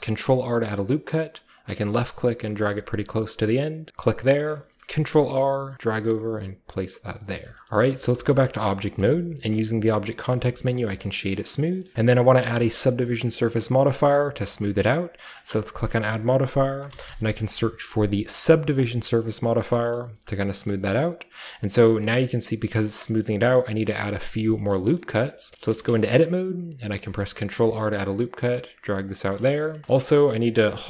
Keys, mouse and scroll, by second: 1.5 click, 3.5 click, 4.5 r, 5.2 ctrl+click, 7.1 click, 7.4-7.7 scroll down 1, 7.5 click, 7.5-10.4 shift+middle drag, 7.7-8.3 shift+scroll up 1, 8.1 Tab, 8.3-9.0 shift+scroll down 1, 9.0-10.3 scroll up 1, 9.5 w, 10.3 scroll up 1, 10.4-11.3 drag, 11.3-11.7 middle drag, 11.8-13.8 shift+middle drag, 11.9 n, 14.0-15.5 middle drag, 15.5-19.5 drag, 18.7 typing, 19.7 middle click, 19.9 shift+middle click, 20.7-21.3 shift+middle drag, 21.4-21.9 shift+middle drag, 21.6-22.7 shift+scroll up 1, 22.0-22.8 shift+middle drag, 22.7 scroll up 1, 22.7 scroll down 1, 22.8-23.8 scroll up 1, 22.8 typing, 23.0 middle click, 23.2-23.8 middle drag, 23.8-25.3 scroll up 1, 24.0 middle click, 24.2-24.5 middle drag, 24.7 middle drag, 25.0 middle click, 25.2 middle drag, 25.3-25.9 scroll down 1, 25.6 middle click, 25.7 Tab, 25.9-26.9 scroll up 1, 26.1-27.5 middle drag, 26.7-27.5 typing, 26.9-27.5 scroll up 1, 27.5-29.1 drag, 29.3-30.8 shift+middle drag, 29.9-30.8 shift+scroll up 1.